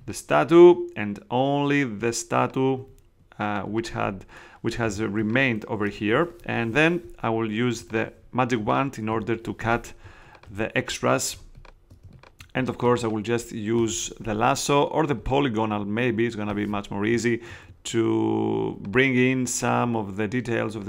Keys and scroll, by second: 4.8 space, 11.2 shift+space.